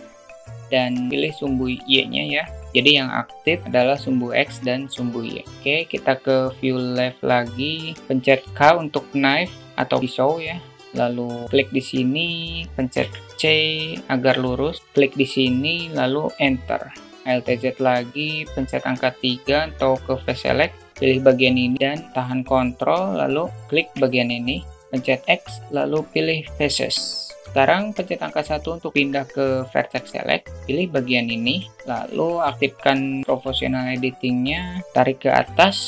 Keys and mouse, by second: 8.5 k, 17.3 alt+z, 17.9 alt+middle click, 19.3 3, 20.9 click, 21.6 middle click, 24.6 alt+middle drag, 25.5 x, 27.5 \, 31.2 click, 33.3 click, 33.9 shift+middle click, 35.7 g.